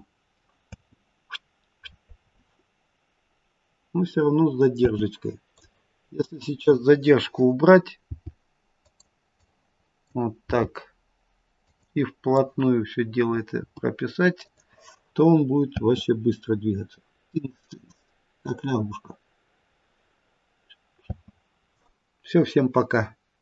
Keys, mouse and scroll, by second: 0.6 space, 4.7 space, 5.4 click, 7.9 g, 9.2 click, 10.3 g, 12.2 click, 15.2 g, 15.6 space, 21.0 space.